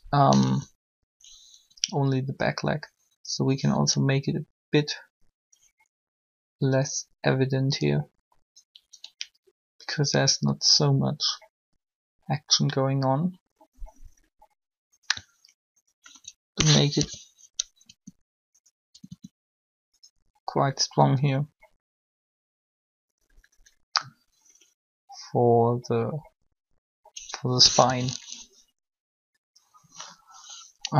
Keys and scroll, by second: 0.4 1, 1.6 r, 16.9 shift+1, 17.8 r, 19.1 r, 27.7 3.